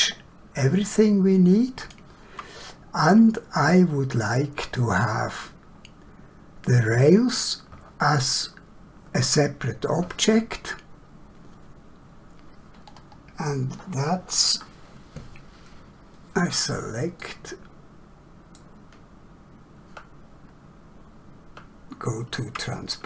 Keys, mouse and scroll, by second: 0.0 scroll up 1, 0.8 shift+middle click, 2.5 middle click, 17.2 middle click.